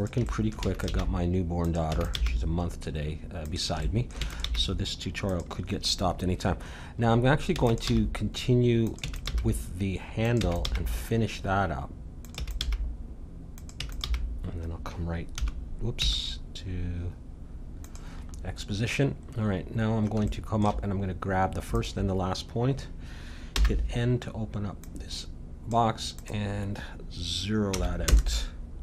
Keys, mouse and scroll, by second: 0.6 e, 0.9 g, 1.8 e, 2.2 g, 4.2 e, 4.5 g, 7.6 e, 7.9 g, 9.0 e, 9.3 g, 10.4 e, 10.6 g, 12.4 e, 12.6 g, 13.8 e, 14.0 g, 18.4-21.7 middle drag, 21.7-23.5 drag, 23.5 n, 24.8-27.9 drag.